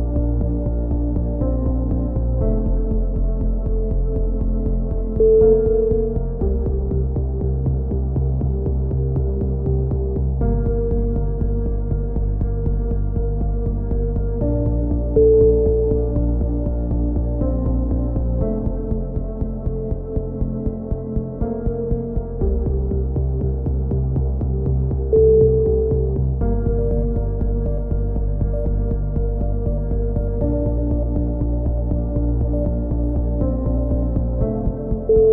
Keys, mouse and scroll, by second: 0.4 s, 1.1 e, 2.8 a, 2.9 middle click, 3.1 z, 6.3-9.6 drag, 7.5 ctrl+z, 9.1 x, 10.5 KP_3, 10.6 middle click, 10.9 z, 11.5 b, 12.6 middle click, 13.0 e, 14.6 e, 15.0-16.6 drag, 16.9 s, 18.3-21.2 drag, 19.5 a, 19.8 z, 22.3-23.9 drag, 23.5 z, 23.9 c, 24.9 click, 28.4-30.4 middle drag, 30.4-32.2 drag, 32.2 middle click, 32.6-33.8 drag, 34.2 a, 34.5 z.